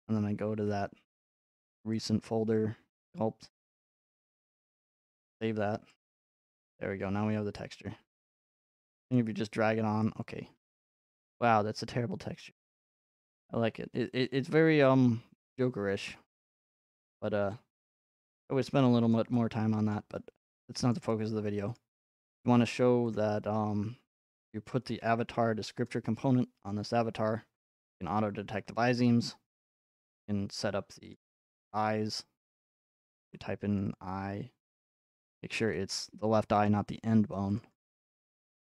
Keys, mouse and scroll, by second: 0.8-2.0 scroll, 2.0 click, 5.1-8.1 drag, 9.1 click, 18.5 right click, 19.1-19.9 scroll, 19.9 right click, 20.9 scroll, 21.8 right click, 23.1 click, 24.7-25.3 typing, 25.9 click, 27.6 click, 28.3 scroll, 29.0 middle click, 29.6 click, 29.7-30.4 scroll, 29.8 middle click, 31.1 click, 32.8-33.2 typing, 33.8 click, 33.9 click, 35.0 click, 35.5 typing, 36.7 click, 37.6 click, 37.7 click.